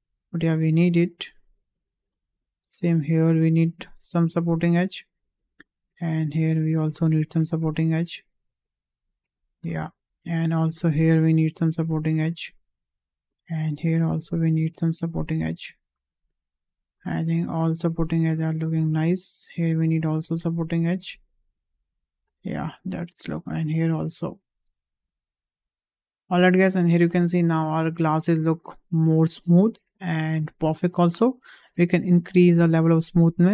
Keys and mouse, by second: 2.2-4.4 drag, 4.8 shift+middle click, 5.8-7.6 drag, 8.3-9.3 drag, 9.8 shift+middle click, 11.2-12.3 drag, 12.6 middle click, 13.3-15.3 drag, 15.9 shift+middle click, 16.2 middle click, 17.7-21.0 drag, 21.8 middle click, 23.1-24.6 drag, 25.8 click, 26.1 click, 26.3 Tab, 26.7 middle drag, 27.3 `, 28.5 shift+middle drag, 29.2-29.6 shift+middle drag, 32.2 click, 32.8 shift+middle drag.